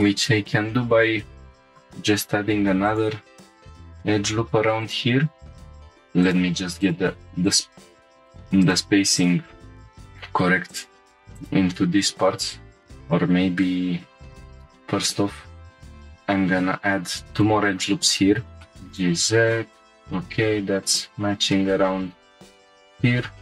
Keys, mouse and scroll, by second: 0.4 scroll up 1, 1.9 ctrl+r, 4.8 click, 5.7 1, 5.9 2, 6.2 click, 6.8 shift+click, 12.5-13.5 scroll down 1, 13.7 ctrl+z, 14.0-15.8 ctrl+z, 16.3 ctrl+r, 17.7 right click, 18.6 shift+middle click, 18.8 1, 18.8 g, 18.8 z, 18.9-20.1 drag, 20.1 g, 20.3 z, 20.9 click, 21.2 scroll down 2, 21.5-23.4 middle drag.